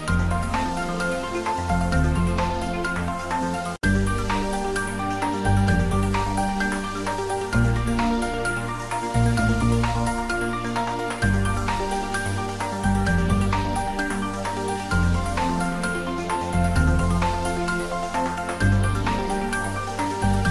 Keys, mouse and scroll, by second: 0.3 shift+right click, 0.8 shift+a, 2.1 click, 2.7 scroll up 1, 2.9 s, 3.4 click, 3.6 g, 5.0 Right, 5.8 click, 6.2 s, 6.3 z, 8.0 click, 8.2 g, 8.4 z, 10.4 click, 10.6-11.2 scroll up 1, 11.7 click, 12.0 scroll up 1, 12.3 shift+z, 13.0 g, 16.3 click, 16.4 scroll down 1, 16.7 middle click, 17.3-18.0 scroll up 1, 18.0 s, 19.1 click, 19.8 scroll up 1, 20.4 shift+d.